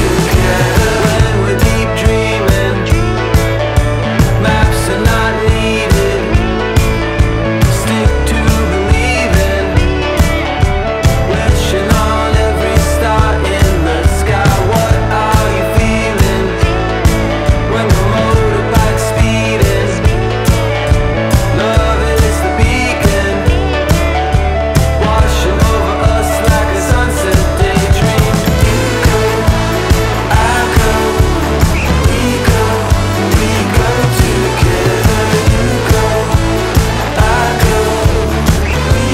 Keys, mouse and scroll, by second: 2.8-8.4 drag, 13.8 alt+g, 14.6-37.7 drag.